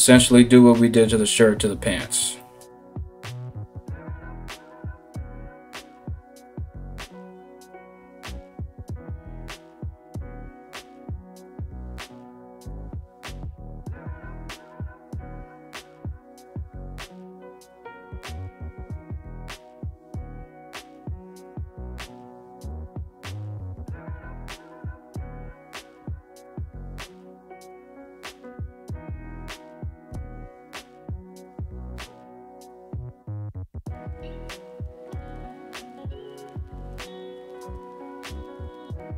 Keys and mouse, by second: 4.0 ], 10.9-11.4 ctrl+z, 11.6 ctrl+z, 19.7 ctrl+z, 20.2 ], 20.4 ], 30.2 Return, 32.6 [, 33.4 alt+[, 33.7 ], 36.1-36.5 ctrl+z.